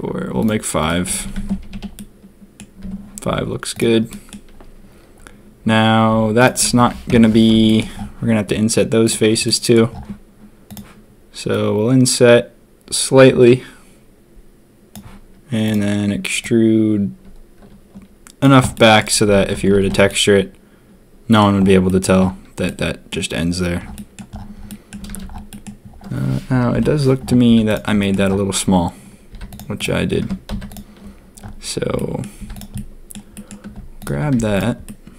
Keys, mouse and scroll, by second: 1.0 a, 1.2 a, 1.3 Tab, 1.5 a, 1.7 a, 1.9 click, 2.8 Tab, 3.7 click, 4.0 click, 7.0 ctrl+KP_3, 7.6 shift+click, 9.4 middle click, 10.6 click, 16.4-18.4 drag, 18.7 middle click, 19.2 a, 19.3 a, 19.5 Tab, 19.6 a, 19.8 a, 20.0-21.3 middle drag, 21.8 middle drag, 22.6-23.0 drag, 23.9 drag, 24.6 drag, 25.1 ctrl+s, 25.4 drag, 26.7 ctrl+KP_3, 27.4 z, 29.3 z, 29.7 click, 30.2 Tab, 30.5 z, 31.9 middle click, 32.3 z, 32.7 middle click, 33.3 middle click, 33.9 alt+click, 34.3 z, 34.8-35.1 drag.